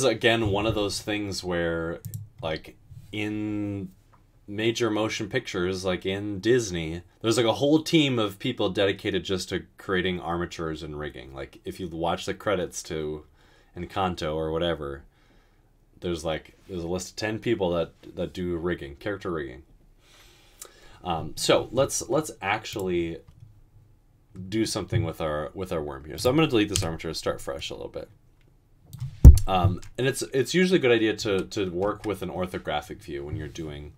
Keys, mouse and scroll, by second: 26.8 Delete, 31.3-31.9 typing.